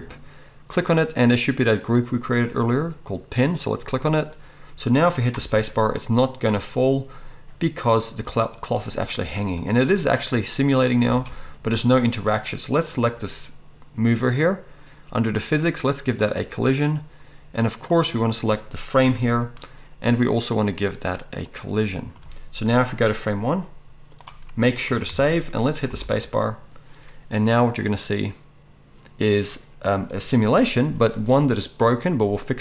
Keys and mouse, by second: 5.4 space, 11.0 space, 12.8-16.3 middle drag, 16.3-18.0 drag, 18.0-21.4 middle drag, 19.0 g, 21.4-32.6 drag, 24.9 ctrl+s, 25.1 ctrl+s, 25.9 space.